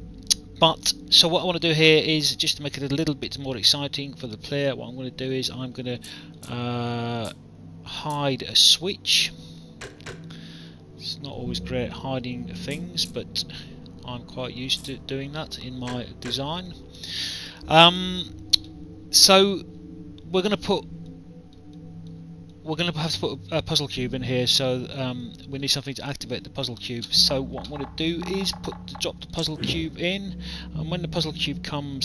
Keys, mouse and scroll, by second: 1.6 alt+click, 2.5 alt+click, 5.9 alt+click, 7.2 click, 9.5 click, 10.7 alt+click, 12.6 click, 16.7 alt+click, 17.7 alt+click, 19.1 alt+click, 21.0 alt+click, 25.2 alt+click, 29.2 click.